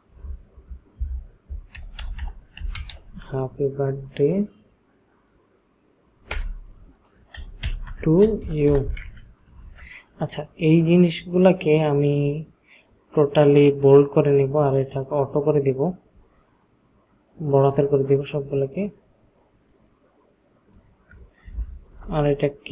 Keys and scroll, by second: 1.5-3.4 typing, 6.4 Return, 7.3-9.5 typing, 22.0 Return.